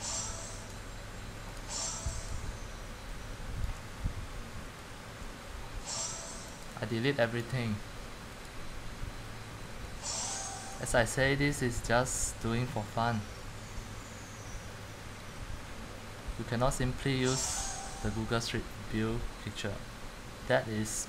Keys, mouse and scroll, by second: 1.7 click, 3.8 click, 4.8 Delete, 7.0 right click, 7.5 click, 9.5-10.2 drag, 10.8-12.2 drag, 15.6-16.8 middle click, 18.3-19.9 scroll down 2, 19.9-21.0 scroll down 2.